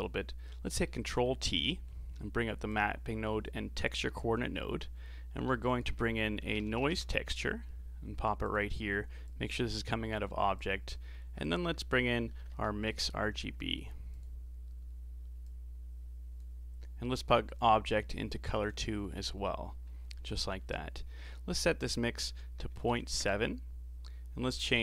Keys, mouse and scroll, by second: 0.7-1.1 middle drag, 1.1 ctrl+t, 1.6-2.1 middle drag, 2.1 scroll down 3, 2.7 click, 5.5 shift+a, 9.3 click, 10.6 click, 11.2 shift+a, 15.4-15.8 drag, 17.6 click, 21.8-24.8 drag.